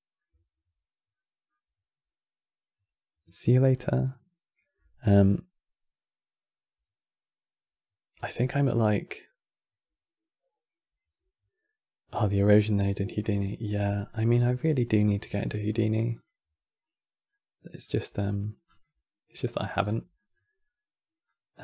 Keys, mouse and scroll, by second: 13.7 middle click, 14.2-15.8 scroll up 4, 15.8 click, 17.0-18.4 middle drag, 18.4 click, 19.5-19.9 scroll down 6, 19.9-21.0 middle drag, 21.0 click.